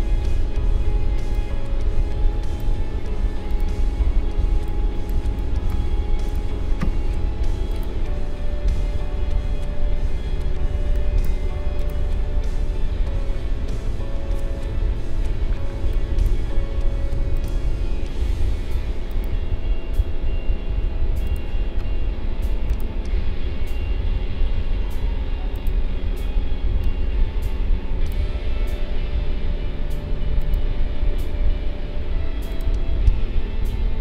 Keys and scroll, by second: 4.5 space, 15.7 space.